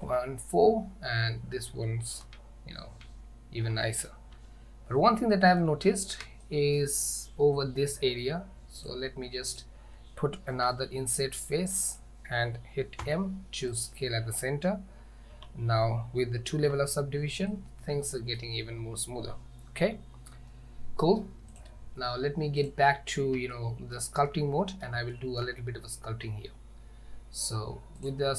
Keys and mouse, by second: 0.1 ctrl+4, 2.4 ctrl+z, 3.0 ctrl+z, 4.4 Tab, 5.4 shift+middle click, 6.5 shift+middle click, 8.8 click, 13.1 m, 15.4 Tab, 16.7 ctrl+2, 17.6-18.5 middle drag, 22.6 click, 23.6 shift+middle click, 24.3-24.9 middle drag, 25.2 shift+middle drag.